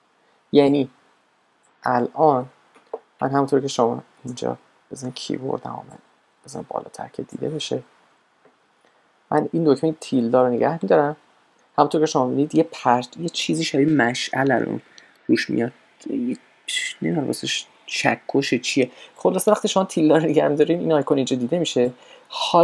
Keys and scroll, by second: 9.6 `, 12.7 `, 19.5 `, 20.3 `.